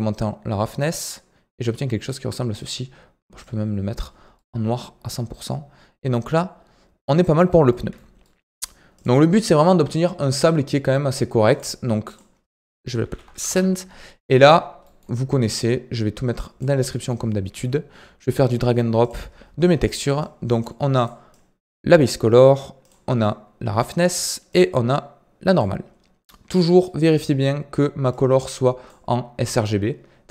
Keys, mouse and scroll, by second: 4.4-7.1 middle drag, 7.1-7.6 scroll down 2, 7.6-8.5 middle drag, 8.5-8.9 scroll down 2, 8.9 click, 11.4-14.3 drag, 14.3-14.7 scroll down 11, 14.8-16.3 middle drag, 16.3 click, 16.7-19.8 scroll up 5, 26.8-28.0 middle drag, 28.0-30.3 drag.